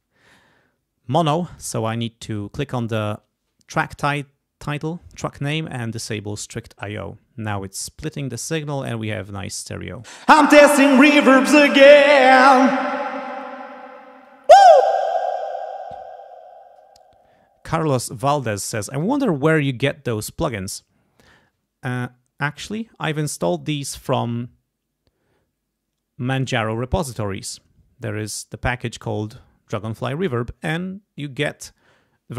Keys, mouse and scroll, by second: 2.2 click, 6.2 click, 10.0 space, 12.6 click, 12.9-13.6 scroll up 2, 14.2-14.7 scroll up 1, 14.8 space.